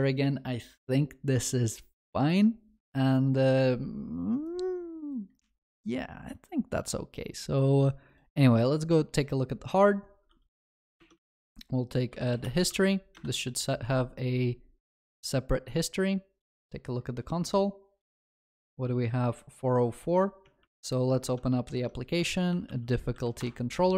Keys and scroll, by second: 21.7 ctrl+shift+n.